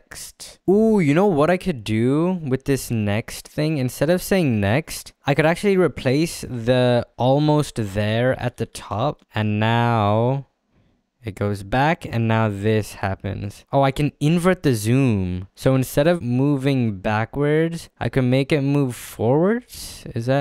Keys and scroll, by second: 7.3-8.9 typing, 13.6 ctrl+z.